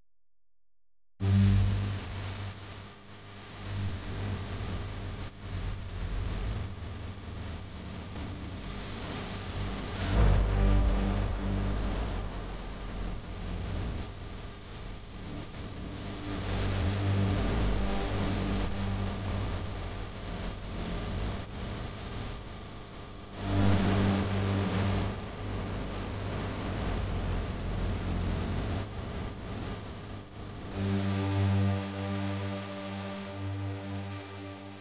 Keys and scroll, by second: 15.6 c, 16.6 m, 17.6 c, 21.4 m.